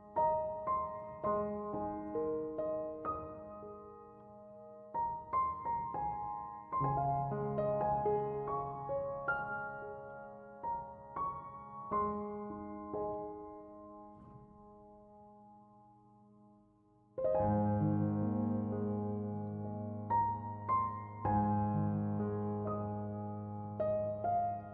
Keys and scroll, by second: 9.0 1, 9.2 Return.